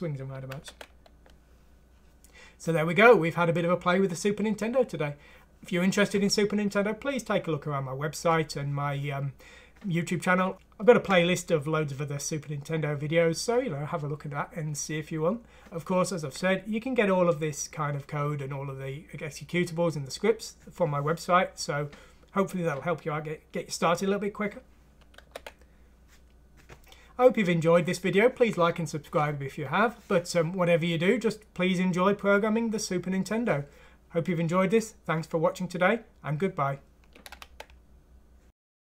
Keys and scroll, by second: 0.5 ctrl+1.